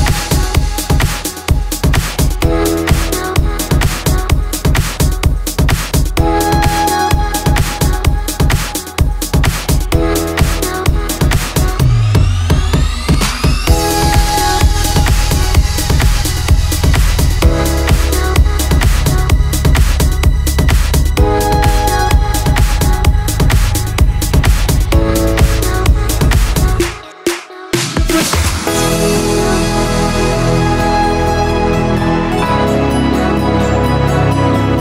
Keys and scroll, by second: 0.4 ctrl+z, 1.6 ctrl+z, 2.6 ctrl+z, 4.5 ctrl+z, 5.2 ctrl+z, 5.9 ctrl+z, 6.5 ctrl+z, 7.9 ctrl+z, 8.3 ctrl+z, 14.1 ctrl+z, 28.0 ctrl+z, 31.9 ctrl+z, 33.7 ctrl+z.